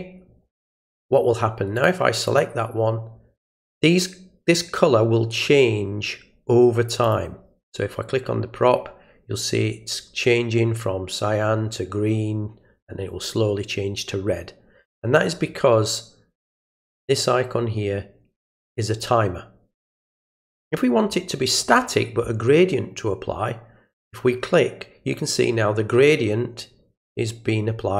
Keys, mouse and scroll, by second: 1.8 click, 2.3 click, 7.0 click, 23.9 click.